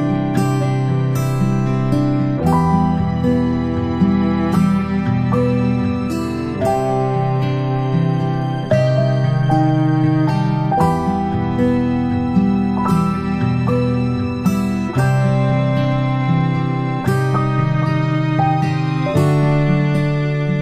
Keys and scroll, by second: 2.6 ctrl+Delete, 3.0 ctrl+Delete, 3.9 ctrl+Delete, 6.7 Delete, 7.6 Delete, 14.1 ctrl+shift+space, 15.8 space, 16.0 space.